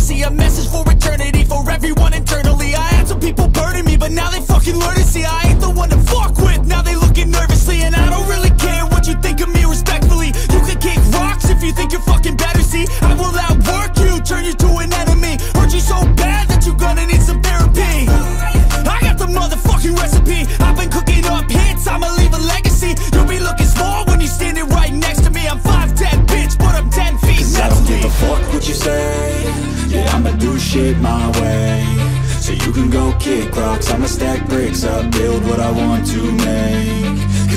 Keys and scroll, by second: 17.2 o, 21.6 ctrl+alt+shift+e, 24.6 Return.